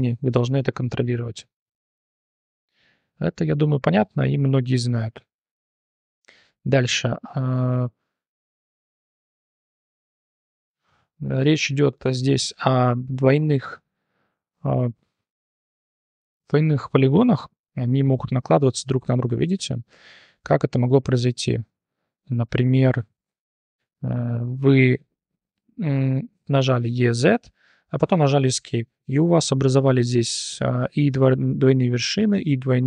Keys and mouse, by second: 0.1 3, 0.3 right drag, 0.5-1.1 drag, 1.9 shift+n, 2.5-3.2 drag, 3.3 Tab, 3.5 click, 5.5 h, 6.3 click, 6.8-7.7 drag, 8.3 click, 8.8 BackSpace, 9.6 shift+middle click, 10.2 click, 10.9 /, 11.2 click, 12.3 click, 12.8 Tab, 13.2 3, 13.4 click, 13.8 shift+click, 17.4 click, 18.0 3, 18.6 g, 23.1 x, 23.7 2, 24.2 alt+click, 25.6 f, 26.8 e, 29.1 3, 29.3-29.9 drag, 30.0 1, 31.2-32.8 typing, 32.2 click.